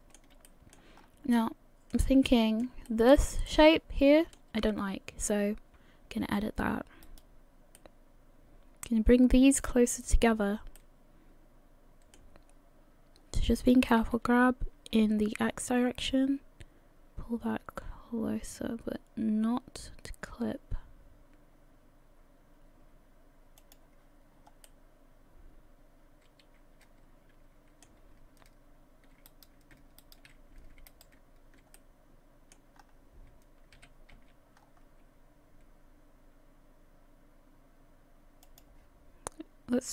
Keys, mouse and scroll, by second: 0.5 shift+middle click, 1.0-1.3 scroll up 3, 1.3 middle click, 2.3 shift+middle click, 2.9 middle click, 3.5 shift+middle click, 7.0 right click, 7.8 middle click, 10.8 middle click, 14.0 g, 24.7 middle click, 27.2 middle click, 29.3 right click, 30.0 shift+right click, 30.9 right click, 31.8 middle click, 32.8-33.5 scroll up 2, 33.8 g.